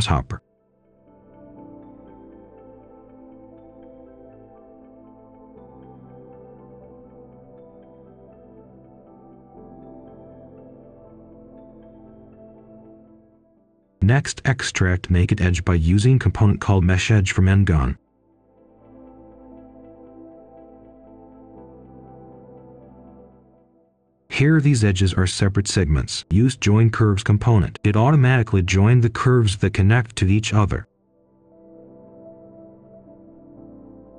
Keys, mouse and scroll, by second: 0.6 shift+click, 1.3 shift+click, 1.9 shift+click, 2.2 shift+click, 3.2 click, 3.5 right click, 4.4 click, 5.5 right click, 6.3 click, 6.9 ctrl+a, 7.6 ctrl+h, 9.3 click, 9.9 right click, 11.3 click, 12.2 right click, 12.6-13.0 scroll up 1, 13.0 click, 13.7-15.4 typing, 16.2 click, 18.8-19.9 typing, 19.9 click, 21.9 ctrl+right click, 23.0 click, 24.0 right click, 24.8 click, 25.8-27.5 typing, 28.0 click, 30.6 middle click, 31.1 click, 31.9-32.4 scroll down 1, 32.4 right click, 33.2 click.